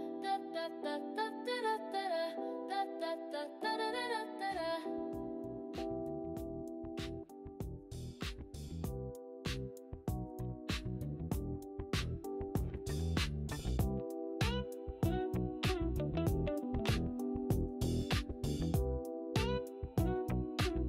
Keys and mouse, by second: 0.2 click, 0.8 g, 1.4 click, 3.1 g, 5.5 click, 5.9 g, 7.6 click, 8.0 g.